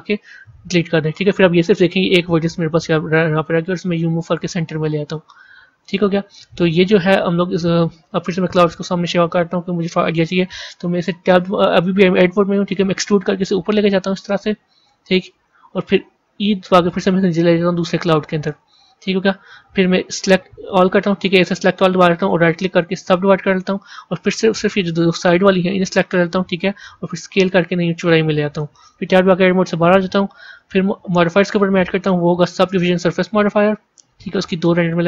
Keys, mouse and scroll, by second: 2.0 click, 6.6-7.0 scroll down 2, 8.7 click, 9.2 scroll down 1, 22.1-24.0 right drag, 24.0 click, 28.7 Tab, 30.2 click, 31.3-35.0 drag.